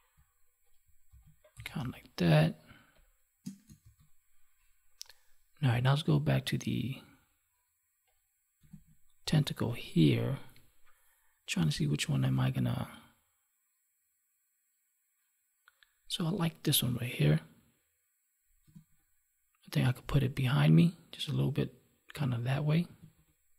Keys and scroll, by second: 1.0 ctrl+s, 1.7 space, 3.7 ctrl+s, 8.6 ctrl+Tab, 18.6 ctrl+Tab, 22.9 ctrl+Tab.